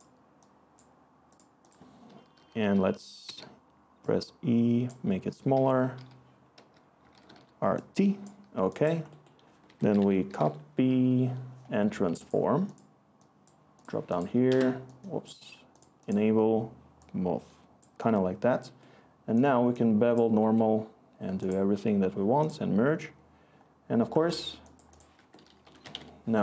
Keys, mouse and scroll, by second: 0.0-0.4 typing, 5.3-7.8 typing, 9.6 Tab, 9.7-10.9 typing, 14.4 Escape, 25.1 Tab, 25.6-26.4 typing.